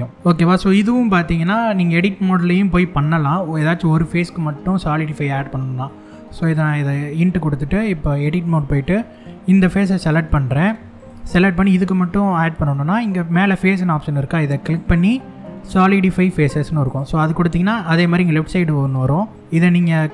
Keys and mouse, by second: 6.1 click, 8.0 Tab, 8.4 middle click, 10.5 3, 10.6 click, 14.2-16.7 drag, 18.9 click, 20.0-20.1 drag.